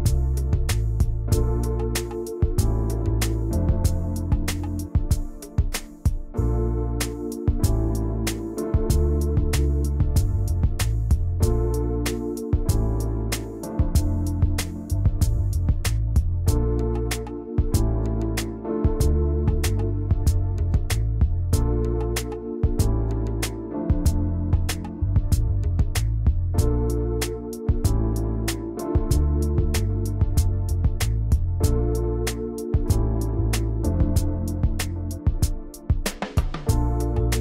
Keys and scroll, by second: 7.8 ctrl+0, 24.0 m, 24.7 v, 27.9 v, 31.3 ctrl+[, 31.9 ctrl+].